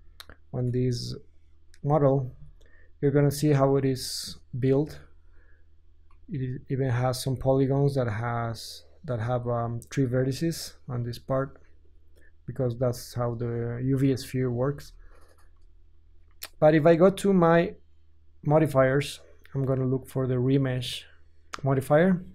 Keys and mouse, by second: 2.5-9.4 middle drag, 9.4 click, 9.6 middle click, 9.8-12.4 drag, 12.4-13.8 middle drag, 14.7 Tab, 18.2-22.3 drag.